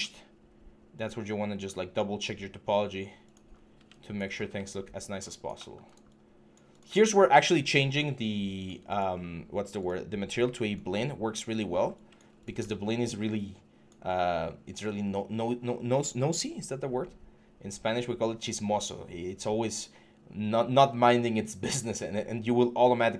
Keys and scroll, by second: 3.3 3, 3.5 q.